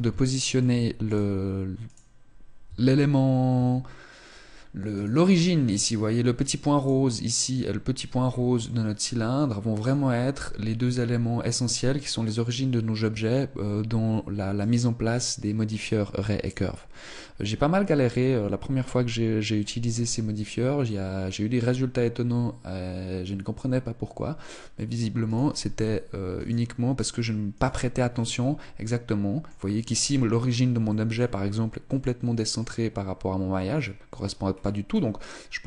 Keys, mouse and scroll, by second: 0.1 right click, 1.0 right click, 2.4 Tab, 3.3 Tab, 4.7 right click, 6.5 right click, 7.9-8.7 scroll up 2, 8.1 middle click, 9.5 right click, 14.3 right click, 16.1 right click, 24.9 right click, 26.1 right click, 27.3 right click, 27.8 middle click, 29.6-30.4 scroll down 6, 30.6 middle click, 31.5 middle click, 34.2-34.7 scroll up 3, 34.9 middle click.